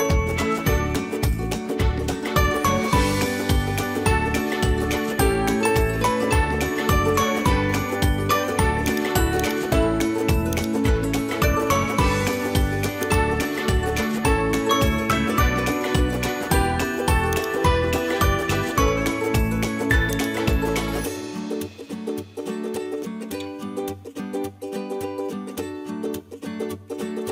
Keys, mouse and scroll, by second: 0.0 r, 3.0 middle click, 4.0 s, 9.4 click, 10.2 Tab, 10.5 click, 11.3 shift+s, 13.7 middle click, 14.4 Tab, 15.1 shift+a, 18.3 s, 21.2 s, 25.2 g, 27.2 middle click.